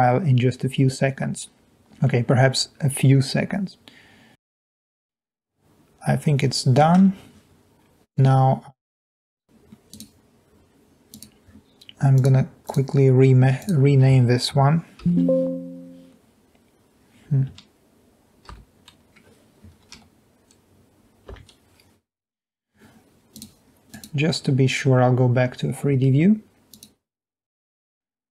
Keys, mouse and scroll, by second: 5.1-6.8 middle drag, 15.1 shift+;, 18.7 shift+_, 20.1 1, 21.5 Return, 26.7 click.